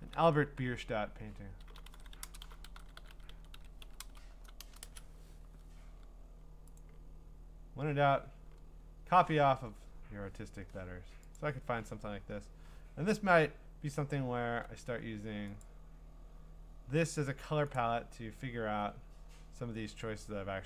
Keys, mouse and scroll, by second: 0.6-4.6 typing, 4.9 Return, 6.7-7.4 typing, 8.9 click, 11.4-14.4 drag, 15.6-17.2 drag, 17.8 click.